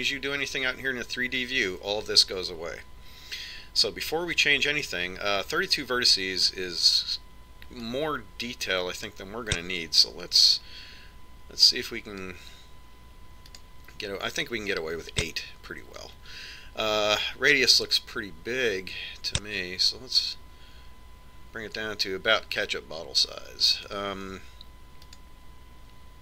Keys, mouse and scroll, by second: 9.4 click, 15.1 click, 16.9 click, 19.3 click.